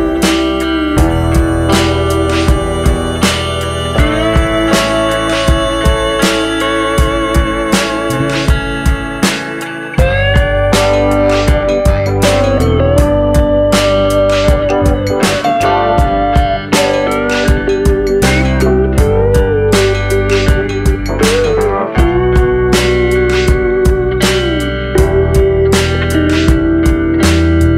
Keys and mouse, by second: 1.6 shift+middle drag, 2.0-2.3 middle drag, 2.5 shift+middle click, 3.0 shift+middle click, 3.9 shift+middle click, 4.3 middle click, 7.4 shift+click, 8.7 shift+click, 9.3 shift+click, 9.8 shift+middle click, 10.2 middle click, 10.6 shift+middle click, 10.9 middle click, 11.4 shift+middle click, 12.1 middle click, 15.2 e, 19.2 click, 19.6 middle click, 20.6 shift+middle click, 21.0 middle click, 21.9 middle click, 22.2 shift+middle click, 22.9 shift+middle click, 23.4 shift+middle click, 24.4 middle click, 24.8 shift+middle click, 25.5 shift+middle click, 26.2 shift+middle click, 27.5 click.